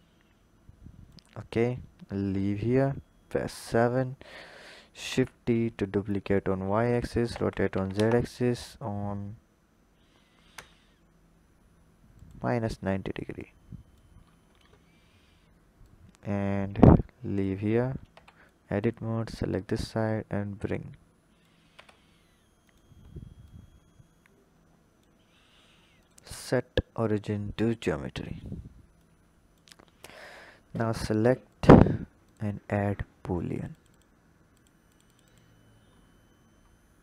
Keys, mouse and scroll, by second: 1.5-2.6 scroll down 5, 2.6 KP_7, 3.0-4.9 scroll down 6, 4.9 shift+d, 6.7 r, 13.2 click, 14.0-15.6 scroll up 7, 15.6 click, 17.5-18.0 scroll down 2, 18.0 Tab, 18.3 click, 19.2 click, 21.6 Tab, 22.5 drag, 23.3 click, 25.8-27.8 drag, 27.8 scroll down 3, 28.8-30.0 drag, 31.3-33.4 drag, 33.7 click, 34.6-35.8 drag, 35.8-36.5 scroll up 2, 36.5-37.0 scroll up 3.